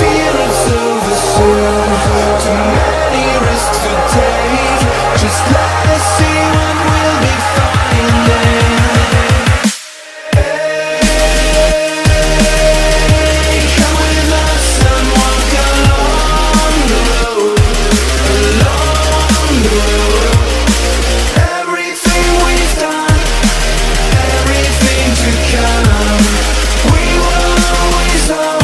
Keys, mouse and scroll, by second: 3.4 click, 4.1-4.5 scroll up 1, 4.7-5.8 right drag, 7.2 alt+click, 8.2 alt+click, 9.0 alt+click, 11.1-12.8 right drag, 13.0 click, 13.3 Delete, 14.9-17.8 drag, 18.0 right click, 19.0 click, 20.0-21.4 typing, 21.7 Return, 23.0-28.6 drag.